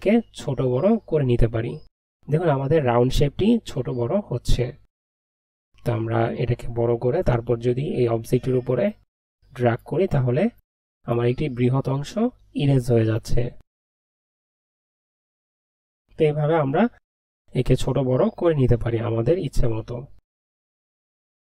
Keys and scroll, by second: 0.0-6.6 typing, 16.1 ctrl+z, 18.7-21.5 typing.